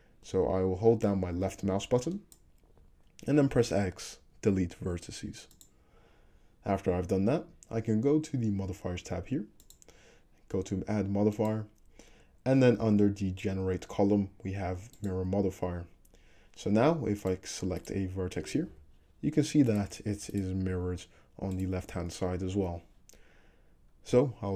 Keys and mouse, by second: 1.2-9.7 drag, 3.7 x, 9.7-11.4 middle drag, 11.4-19.8 drag, 17.2 middle click, 17.2 right click, 17.8 middle click, 17.8 right click, 18.7 g, 19.8 middle click, 20.4 click, 20.4-24.5 middle drag, 20.7 g.